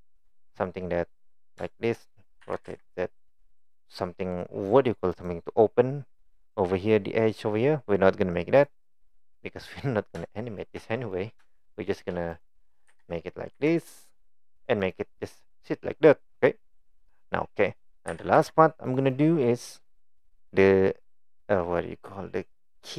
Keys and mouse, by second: 0.5 middle click, 1.6 middle click, 2.4 r, 9.3-9.9 middle drag, 11.8 shift+click, 12.3 click, 12.9 g, 14.8 click, 15.2-15.5 middle drag, 17.6 middle click, 18.1 g, 19.2 click, 19.5 middle drag, 19.9 click.